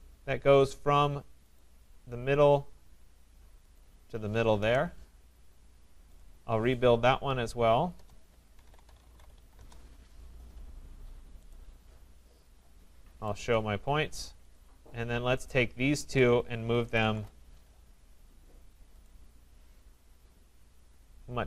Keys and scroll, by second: 4.6 Return, 17.1 Return.